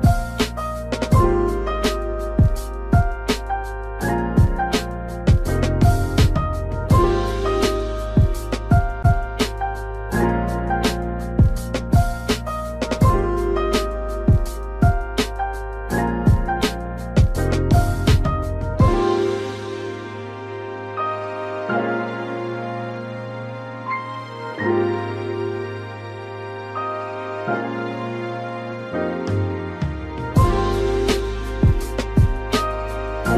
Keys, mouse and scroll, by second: 5.2 click, 9.2 click, 11.5 ctrl+click, 13.4 ctrl+z, 15.1-15.6 typing, 15.2 click, 16.4 click, 18.9 ctrl+click, 20.6 click, 23.8 click, 27.4 ctrl+click, 28.6 ctrl+click, 30.9 ctrl+click, 32.4 click.